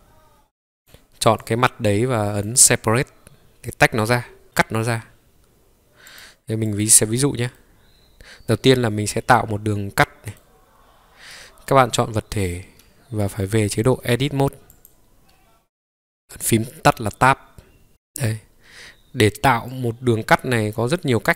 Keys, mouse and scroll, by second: 5.3 middle click, 6.1 click, 6.8 click, 7.6-10.4 middle drag, 14.7-17.9 drag, 17.9 ctrl+scroll up 3, 21.2-21.3 scroll up 3.